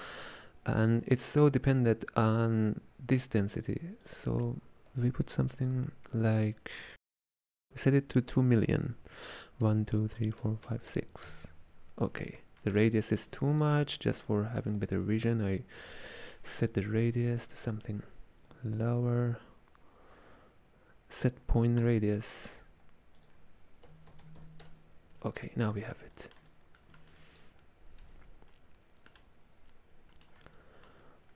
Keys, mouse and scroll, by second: 4.1-7.3 drag, 10.0 KP_0, 10.5 KP_0, 11.0 KP_0, 12.7 middle click, 13.4 click, 16.0 space, 17.4 shift+a, 23.3-24.3 drag, 24.3 KP_0, 25.8-27.4 shift+middle drag, 27.4 click, 28.1-31.3 middle drag.